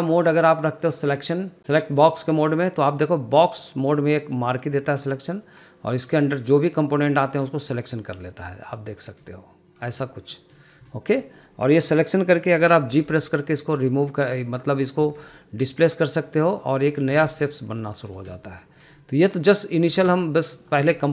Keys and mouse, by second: 0.2-2.7 drag, 3.0 middle drag, 3.7-7.7 drag, 8.8 click, 9.6 middle click, 10.5 click, 10.9 middle drag, 11.3 shift+middle click, 11.6 shift+middle click, 12.0 middle click, 13.2 g, 14.7 drag, 15.2 click, 15.4 g, 16.8 middle click, 17.1 click, 17.5 g, 18.7 middle click, 19.3 middle click, 20.2 g.